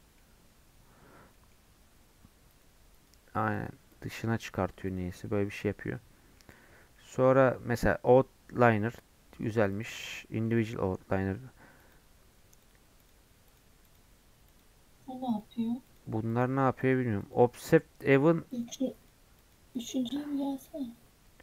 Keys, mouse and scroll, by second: 2.5-5.2 drag, 5.2 middle click, 5.6 scroll down 1, 5.6 scroll up 2, 6.0-7.7 middle drag, 7.7-10.4 drag, 10.4-11.8 middle drag, 11.8-20.4 drag, 20.4 middle click, 20.9-21.4 scroll up 1.